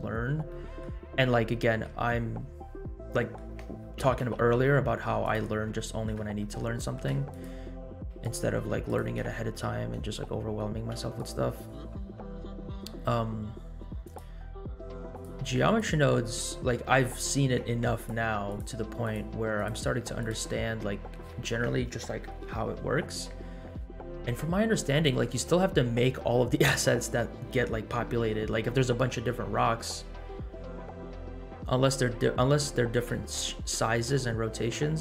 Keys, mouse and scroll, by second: 0.4-0.8 middle drag, 1.7 KP_Decimal, 2.5-2.9 scroll down 3, 3.1 middle drag, 4.0 g, 5.8 shift+middle click, 6.4 shift+middle click, 6.7 shift+middle drag, 7.3 click, 8.2 shift+click, 8.9 shift+click, 10.9 x, 14.0-14.6 drag, 15.2 ctrl+click, 16.0 click, 16.5-17.0 scroll down 1, 17.9 ctrl+click, 18.9 ctrl+click, 19.5 ctrl+click, 20.0 ctrl+click, 20.6 ctrl+click, 20.9 scroll down 1.